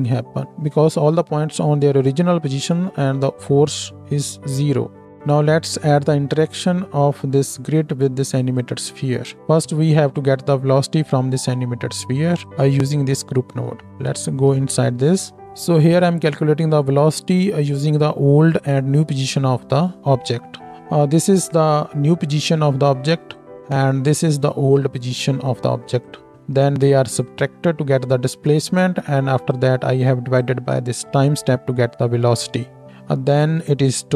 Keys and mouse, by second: 8.4 middle click, 8.4 right click, 12.5-15.4 middle drag, 15.2 Tab, 15.4-34.1 drag.